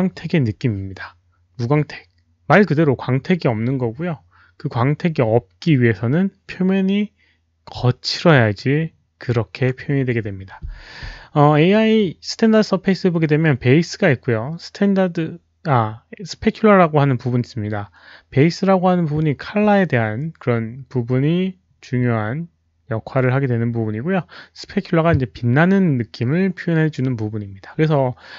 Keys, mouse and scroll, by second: 6.2 click.